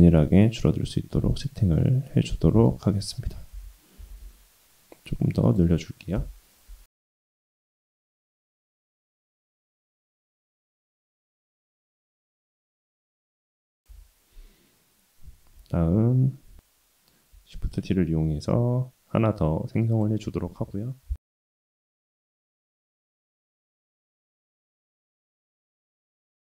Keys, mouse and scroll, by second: 0.2-1.5 middle drag, 1.7-2.7 middle drag, 2.7-3.2 scroll down 1, 3.5 s, 6.8 KP_1, 8.5 Tab, 8.9 Tab, 10.7 click, 11.2-11.7 scroll up 2, 11.7-12.7 right drag, 13.1-14.0 middle drag, 14.2 scroll down 1, 14.6 shift+middle drag, 15.1-16.5 middle drag, 16.6 scroll down 2, 17.5 shift+d, 20.5 KP_1, 21.7 shift+click, 22.1-23.0 middle drag, 23.1-24.2 scroll down 2, 24.2-26.4 scroll up 2.